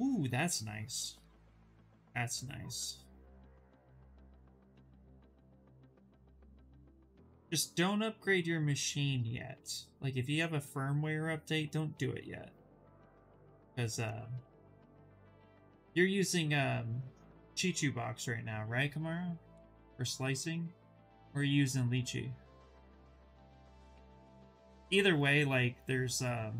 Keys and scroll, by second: 13.9 ctrl+z, 14.0 ctrl+z.